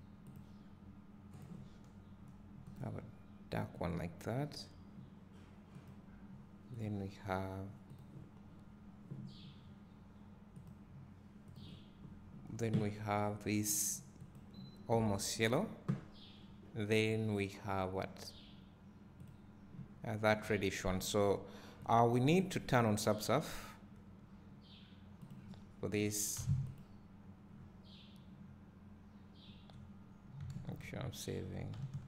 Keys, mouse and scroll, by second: 0.0 click, 5.9-6.8 drag, 19.5-21.0 drag, 21.0 `, 22.4-25.8 drag, 27.0 click, 31.1 ctrl+s.